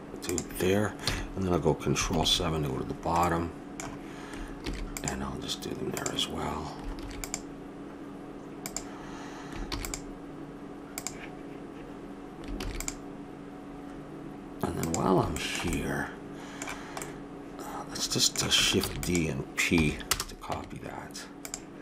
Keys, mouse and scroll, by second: 1.0 a, 2.1 ctrl+KP_7, 3.4 middle click, 4.6 ctrl+r, 6.9 ctrl+r, 9.6 ctrl+r, 12.6 ctrl+r, 15.4-17.8 middle drag, 18.8 shift+d, 19.8 p, 20.5 Tab.